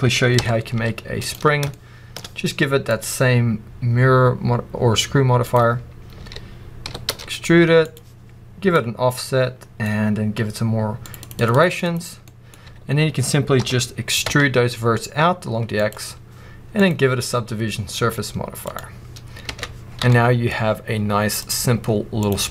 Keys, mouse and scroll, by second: 0.3 ctrl+i, 0.7 x, 1.6-2.8 shift+middle drag, 2.8-7.8 drag, 6.1 a, 6.8 e, 8.6-12.2 drag, 12.2-12.5 middle drag, 12.5 a, 13.5 e, 15.8 click, 16.6-20.0 drag, 19.4 Tab, 19.7 scroll down 2, 20.0-21.3 middle drag, 21.3-22.5 drag.